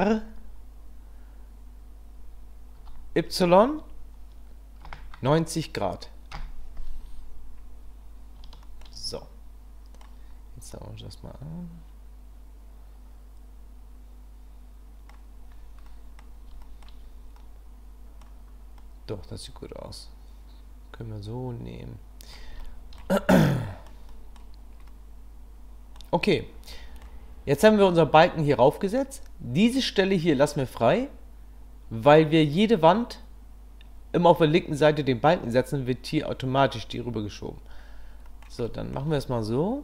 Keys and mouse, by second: 8.6 shift+middle drag, 9.1-10.0 middle drag, 10.7-15.2 middle drag, 16.0 middle click, 16.6 shift+middle click, 17.4-18.2 middle drag, 18.8-22.3 middle drag, 22.7-23.0 shift+middle drag, 23.6 middle click, 24.1 middle click, 25.0-26.2 middle drag, 26.8-38.5 middle drag, 38.7 shift+middle click, 39.1-39.8 middle drag.